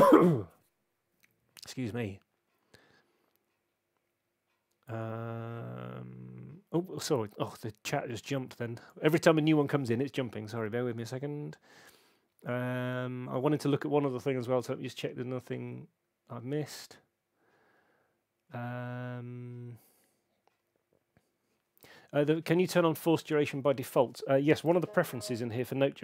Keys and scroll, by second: 25.0 super+,.